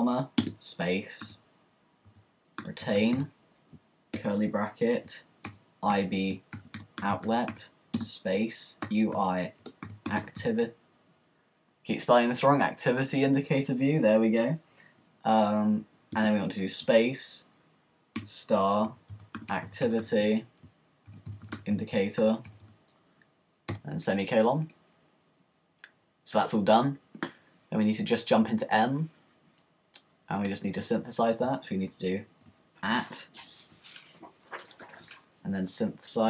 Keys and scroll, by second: 1.2-7.5 typing, 8.7-11.0 typing, 18.2-21.1 typing, 22.5-23.7 typing, 24.9 ;, 30.8 Return, 32.3 @, 32.9 @.